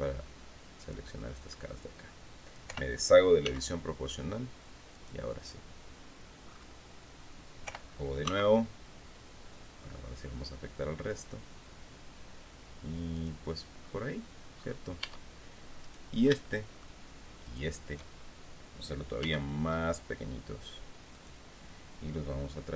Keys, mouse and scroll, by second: 2.1 o, 2.9 s, 4.4 click, 5.0-5.7 scroll down 1, 5.9-6.3 scroll up 1, 7.1 o, 7.7 s, 12.6 click, 13.3-13.6 scroll down 1, 14.1-14.4 scroll up 1, 14.5 Tab, 15.3 right click, 15.9 shift+middle click, 16.9 shift+right click, 18.7 s, 20.6 click, 22.3-22.7 drag.